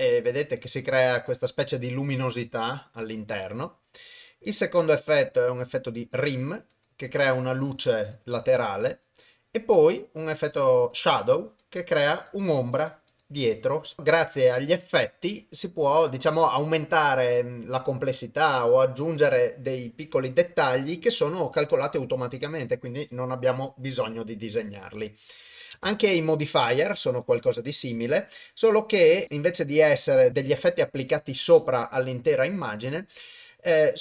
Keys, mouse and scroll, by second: 0.1 click, 0.7 click, 2.0 click, 2.3 click, 5.9 click, 6.7 click, 7.6 click, 10.9 click, 11.6 click, 12.1 click, 12.7 click, 13.1 click, 14.0 shift+space, 25.8 shift+space, 30.3 click, 33.1 click.